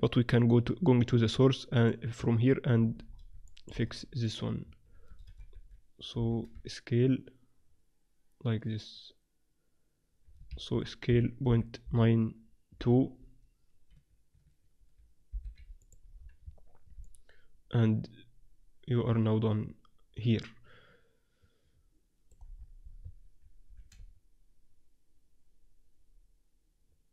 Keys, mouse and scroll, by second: 1.7-3.6 drag, 3.6 middle click, 4.2 right click, 4.7 Tab, 5.1 a, 5.1 click, 5.3 a, 6.2 s, 11.1 s, 16.1-18.3 middle drag, 16.4 Tab, 18.3 click, 18.7 middle click, 19.2 click, 19.8-22.1 middle drag, 22.5-26.2 middle drag, 23.0 Tab, 23.6 s.